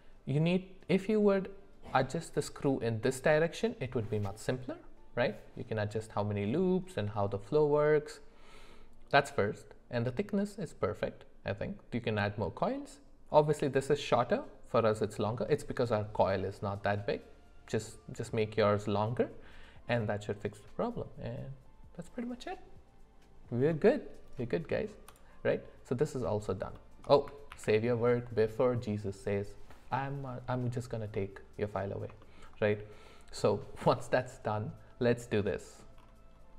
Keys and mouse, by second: 24.4 middle click, 25.1 click, 26.7 shift+middle click, 27.5 ctrl+s, 31.1 middle click, 32.2 shift+middle click.